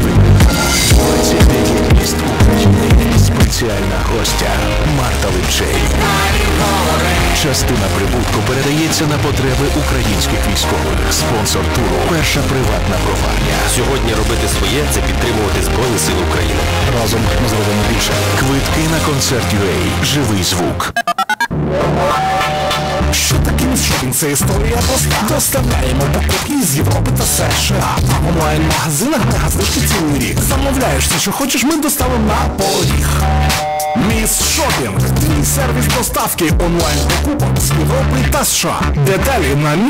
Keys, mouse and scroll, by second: 3.3 Page_Down.